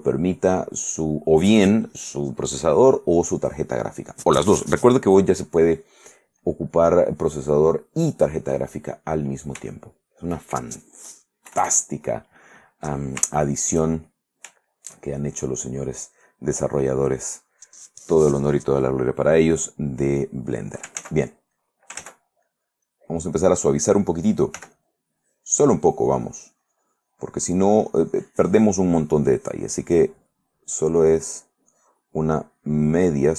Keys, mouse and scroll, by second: 6.6 click, 8.4 click, 9.9 shift+click, 11.7 KP_Add, 13.4 shift+middle click, 14.1-15.6 shift+middle drag, 15.9 middle click, 17.0 middle click, 19.6 click, 21.2 ctrl+z, 21.7 click, 22.2 ctrl+z, 22.6 ctrl+click, 24.7 f, 24.9 click, 25.3-30.6 drag, 30.7-32.4 drag, 32.6 click.